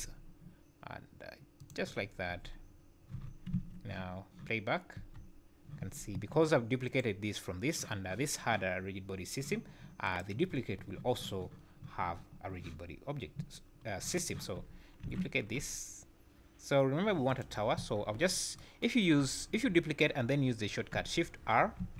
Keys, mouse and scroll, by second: 2.0 scroll down 3, 2.6 scroll down 3, 3.1 z, 3.5 `, 5.0 space, 5.9 scroll up 6, 6.1 Escape, 6.9 click, 10.1 click, 13.9-14.5 scroll down 1, 15.0 shift+d, 18.2-18.6 scroll down 3, 21.8 shift+r.